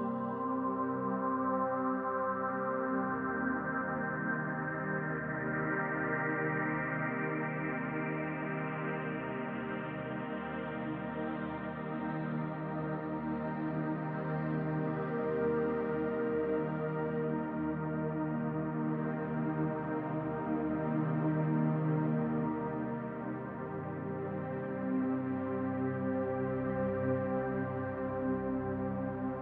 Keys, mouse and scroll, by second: 0.8 middle click, 1.4-2.5 scroll down 6, 2.5 shift+middle click, 3.4-3.8 scroll down 2, 4.1 shift+middle click, 4.2 middle click, 5.5-6.2 scroll up 2, 6.2-6.5 scroll down 1, 11.6 middle click, 12.8 shift+middle click, 13.8-14.6 scroll down 2, 15.1 click, 16.4 click, 18.5 right click, 19.8 click, 20.0 click.